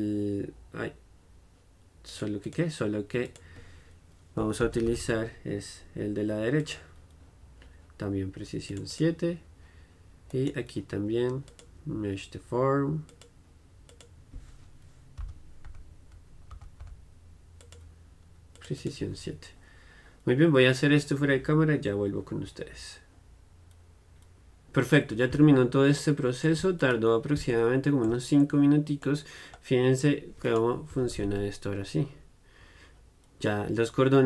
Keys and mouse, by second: 8.9-10.5 drag, 11.0 click, 14.0-15.9 drag, 18.7-26.1 drag, 26.1 middle click, 26.9-28.6 drag, 28.6-30.6 middle drag, 30.6-34.2 right drag.